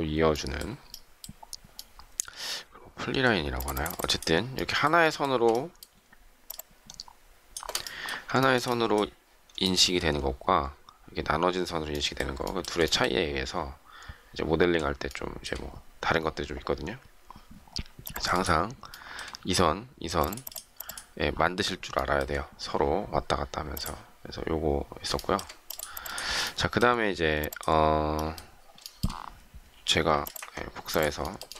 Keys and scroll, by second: 29.7 shift+m.